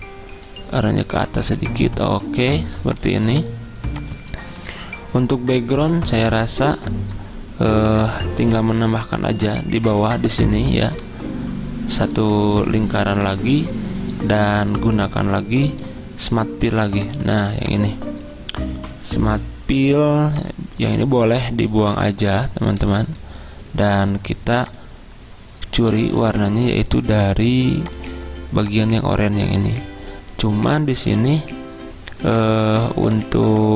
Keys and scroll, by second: 21.9 Delete.